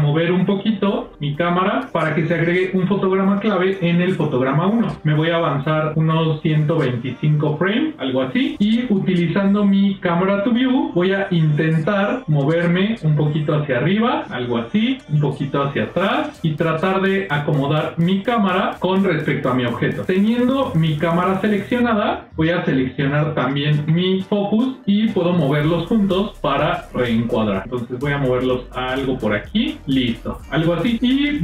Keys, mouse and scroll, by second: 0.9 g, 5.3-7.6 drag, 10.0-11.3 drag, 12.0-14.2 middle drag, 14.5-15.8 ctrl+middle drag, 16.2 middle click, 17.2-18.6 shift+middle drag, 21.8 click, 23.2 shift+click, 25.5 g.